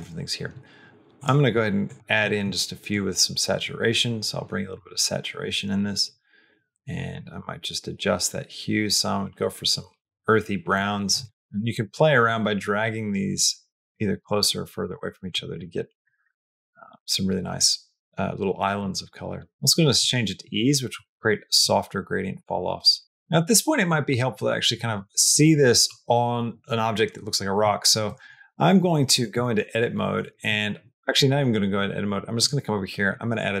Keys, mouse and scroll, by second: 1.0 click, 1.7 click, 11.3 click, 12.1-13.3 drag, 13.6-15.1 drag, 15.4 middle click, 16.1-17.4 middle drag, 18.6-19.9 drag, 21.4 click, 22.9 click, 23.7 middle click, 24.2 middle click, 27.9 middle click, 28.4 middle click, 29.1 Tab, 30.9 Tab, 32.3-33.6 drag.